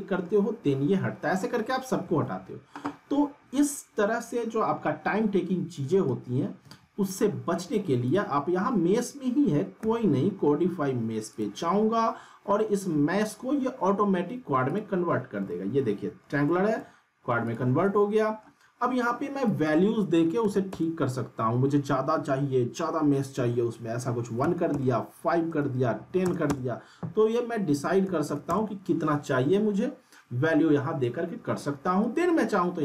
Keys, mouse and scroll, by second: 2.0 ctrl+z, 5.9 ctrl+z, 8.0 click, 9.8 q, 11.3 click, 14.7 click, 15.5-16.4 alt+middle drag, 17.4 click, 17.8-18.5 alt+middle drag, 19.5 click, 32.0 right click.